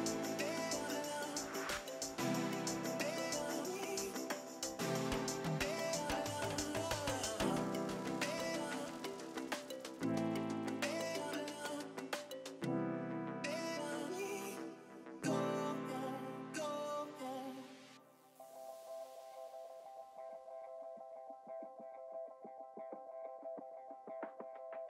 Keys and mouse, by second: 0.1 Return, 1.4 KP_2, 1.5 Return, 2.8 KP_3, 3.0 Return, 3.6 click, 7.6 KP_1, 7.8 KP_4, 7.9 BackSpace, 8.0 KP_5, 8.3 Return, 10.5 click, 15.4 KP_2, 15.6 KP_0, 15.6 Return, 20.6 click.